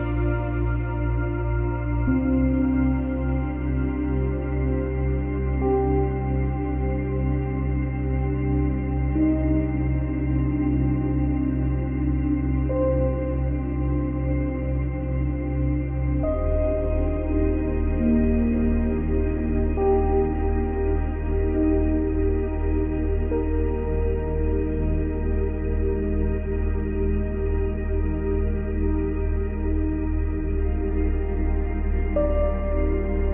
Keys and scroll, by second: 17.3 space, 22.5 space.